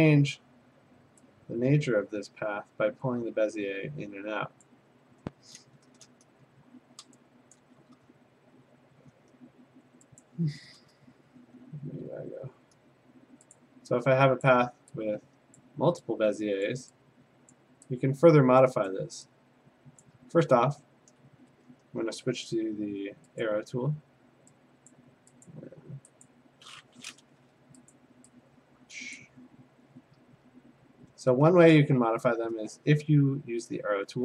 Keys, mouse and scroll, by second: 0.3 click, 4.6 click, 7.5 click, 8.5 f, 10.2 click, 11.4 Tab, 13.6 click, 14.5 click, 15.6 click, 16.7 click, 17.5 click, 18.9 click, 20.0 click, 23.4 click, 24.9 click, 25.5 click, 26.2 click, 27.9 click, 29.2 click.